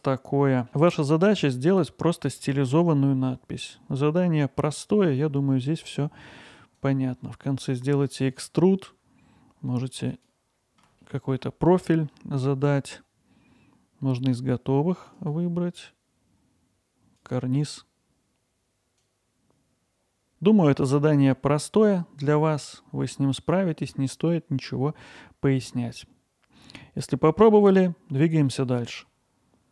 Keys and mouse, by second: 6.9-10.8 drag, 15.2-18.1 drag, 18.2 click, 19.3 ctrl+alt+middle drag, 19.4 middle drag, 19.7 alt+middle drag, 21.4-22.7 middle drag.